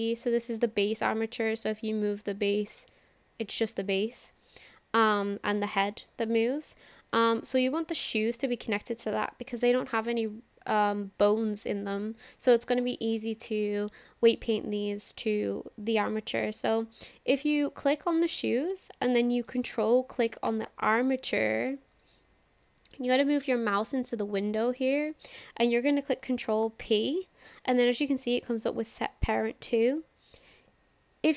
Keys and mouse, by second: 0.4 click, 2.4-3.9 drag, 4.9 ctrl+z, 5.2 click, 6.3-6.8 middle drag, 6.8 click, 6.8 right click, 20.5 ctrl+click, 26.6 ctrl+p.